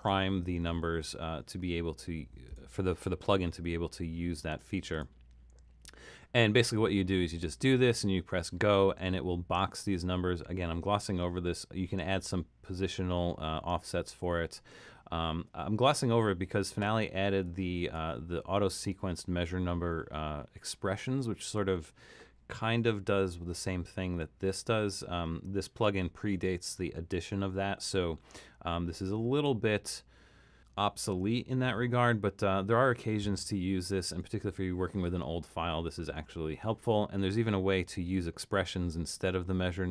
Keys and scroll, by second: 34.1 BackSpace.